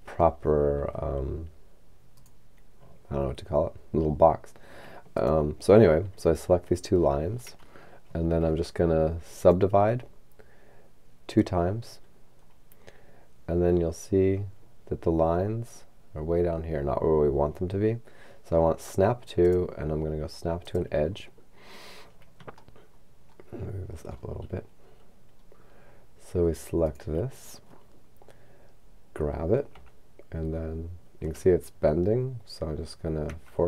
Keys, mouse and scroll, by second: 2.3 right click, 5.2 shift+right click, 9.5 click, 11.4 click, 13.3-15.2 scroll down 2, 19.5 click, 20.6 click, 23.0-24.8 shift+middle drag, 24.8-26.3 shift+scroll up 2, 26.9 right click, 28.8-29.8 scroll down 2, 29.8 g, 33.3 x.